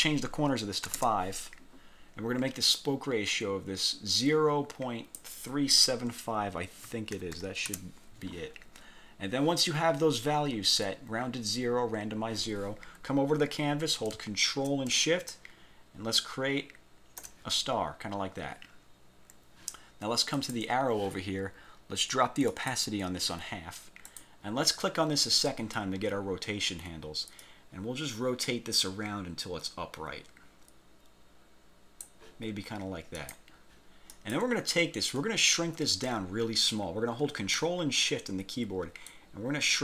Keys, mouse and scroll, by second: 1.0 5, 2.8-5.5 drag, 6.8-8.0 typing, 8.7-9.1 scroll down 2, 9.3 scroll up 2, 15.4-17.5 ctrl+shift+drag, 20.5 click, 22.6 click, 24.2 click, 27.5-32.3 drag, 33.3 click, 34.2 click, 39.2-39.8 ctrl+shift+drag.